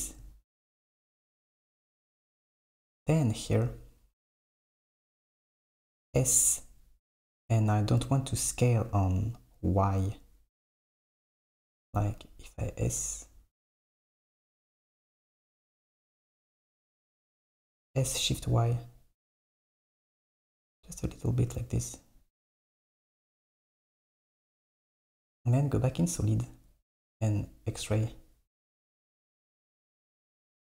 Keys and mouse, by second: 1.5 KP_1, 2.4 super+middle click, 6.0 s, 11.6 s, 15.3 KP_1, 17.9 s, 21.6 Tab, 23.2 s, 25.8 click, 27.0-27.8 drag, 27.9 s, 28.8 click.